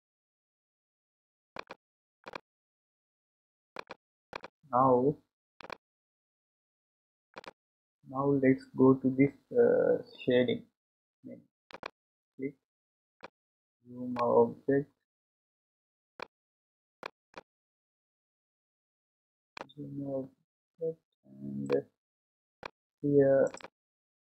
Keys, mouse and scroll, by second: 1.6 click, 2.3 click, 3.7 click, 6.4 click, 7.3 click, 11.7 click, 13.2-14.5 middle drag, 14.5-16.1 scroll up 9, 16.1-23.6 shift+middle drag, 23.6 click.